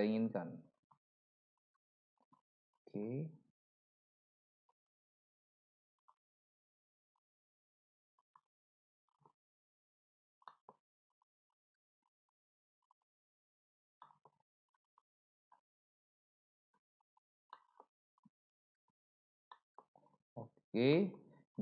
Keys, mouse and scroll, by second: 10.5 middle click, 14.0 middle click, 17.5 middle click, 19.5 middle click, 20.9 middle click.